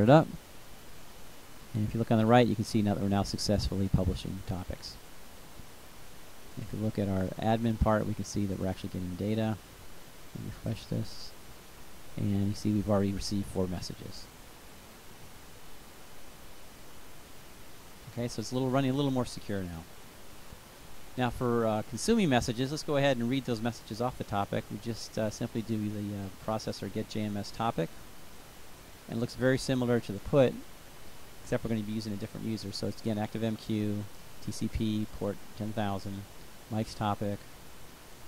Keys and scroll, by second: 23.1-25.0 typing.